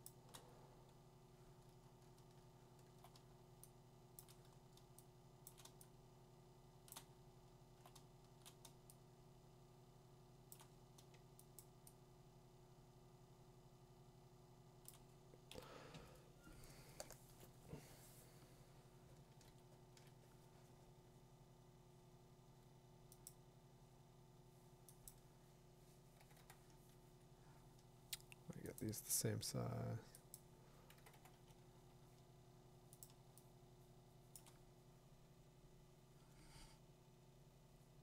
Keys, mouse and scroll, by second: 0.1 click, 0.3 click, 0.3 click, 0.7 Tab, 1.6-3.0 scroll, 3.2 middle click, 3.8 middle click, 4.2 click, 5.5 click, 5.7 click, 6.3 click, 6.9 click, 7.3 middle click, 7.4 middle click, 7.6 middle click, 8.9-9.9 scroll, 10.0-10.5 middle click, 10.1 middle click, 10.5 click, 11.5 click, 11.6 click, 11.7 click, 12.1-12.6 click, 12.7 click, 12.9 click, 13.0 click, 13.4-13.9 click, 14.2 click, 14.4 click, 14.8 click, 15.5 b, 16.7 [, 17.0 ctrl+=, 17.2 [, 17.3 [, 18.5 [, 19.4 ctrl+-, 21.0 ctrl+-, 23.3-25.1 drag, 26.2 6, 26.4 6, 26.7 Return, 27.9 Return, 28.8 click, 30.3 click, 31.0 6, 31.1 6, 31.3 Return, 33.0 Return, 33.0-33.7 click, 34.3 click, 35.3 b.